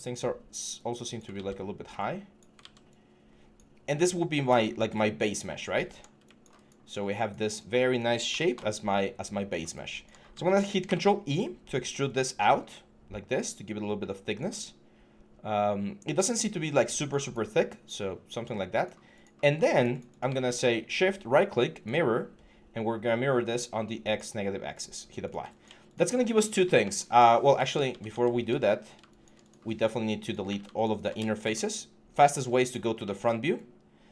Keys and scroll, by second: 1.1 ctrl+z, 2.4 ctrl+z, 5.4 6, 10.6 ctrl+e, 26.3 4, 27.4 ctrl+z, 28.5 5, 30.3 q, 31.2 q.